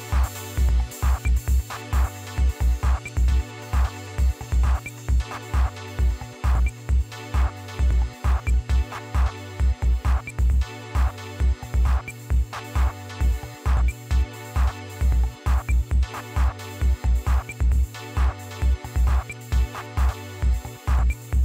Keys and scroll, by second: 0.5 Delete, 0.9 typing, 3.4 Left, 3.7 Delete, 4.9 1, 7.3 Left, 7.7 Delete, 9.1 0, 11.2 Delete, 12.4 5, 14.1 Left, 14.6 Delete, 15.4-15.8 typing.